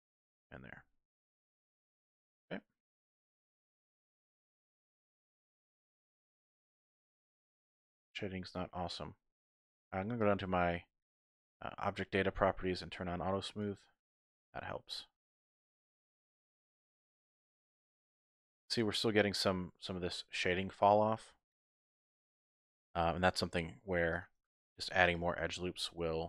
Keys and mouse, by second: 0.4 click, 0.8 Tab, 1.5-3.3 middle drag, 4.2 Tab, 4.7-6.6 middle drag, 6.6 Tab, 8.1 middle click, 10.3 click, 13.5 click, 14.3-15.5 middle drag, 15.6 Tab, 16.2 Tab, 16.4-17.5 middle drag, 17.7 Tab, 18.2 Tab, 20.8 middle click, 21.3 Tab, 23.2 ctrl+r, 24.4 click, 24.7 ctrl+r, 25.2 click, 25.5 ctrl+r, 25.9 click.